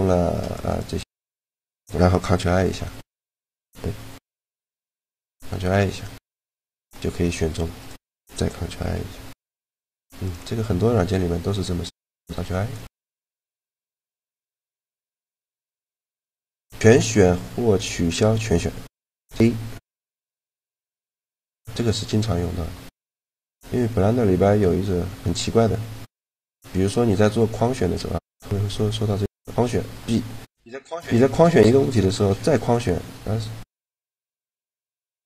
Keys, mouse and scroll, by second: 0.2 middle click, 1.1-2.3 right drag, 2.3 click, 2.4 ctrl+l, 4.8 ctrl+i, 6.3 g, 8.5 ctrl+i, 9.4 g, 11.7 a, 12.0 b, 12.6 g, 13.5 click, 14.0 a, 14.9-16.7 drag, 19.4-20.9 drag, 20.1 a, 20.9 a, 21.6 a, 24.3 a, 28.1-29.7 drag, 30.4 click, 30.7 b, 32.1 b, 33.8 b.